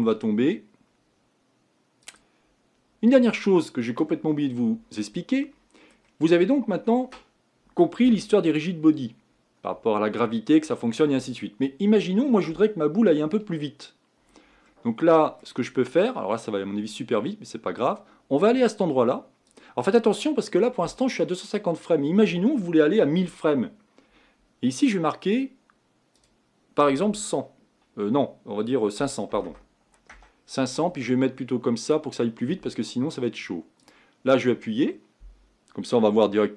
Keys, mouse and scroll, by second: 2.4-5.0 drag, 5.0-31.9 middle drag, 31.9 click, 33.9-36.5 drag.